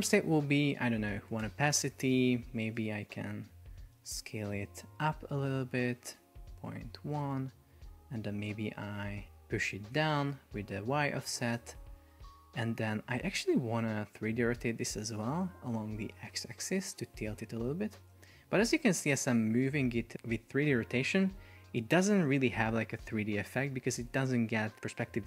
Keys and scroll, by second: 1.5 Return, 3.2 Down, 5.6 Down, 6.5 Up, 17.1 shift+Down, 17.7 shift+Up, 19.0 shift+Down, 20.2 shift+Up, 21.6 shift+Up.